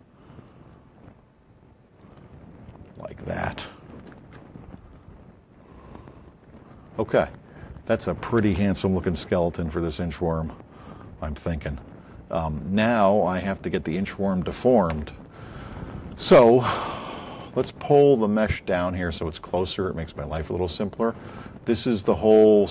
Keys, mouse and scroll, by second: 4.2 a, 5.3-6.1 scroll up 4, 6.8-7.9 alt+drag, 8.9 a, 10.0 scroll up 2.